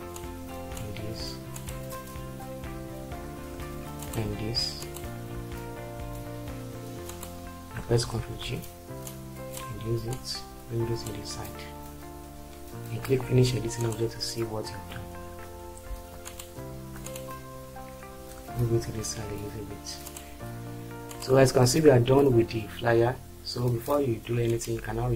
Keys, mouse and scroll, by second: 8.1 ctrl+g, 18.4 Right.